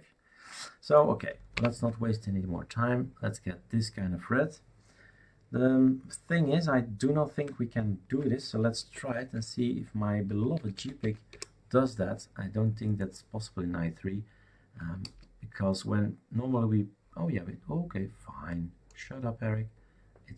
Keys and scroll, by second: 1.5 alt+Up, 8.9 shift+super+d, 10.0-11.5 typing, 15.0 space.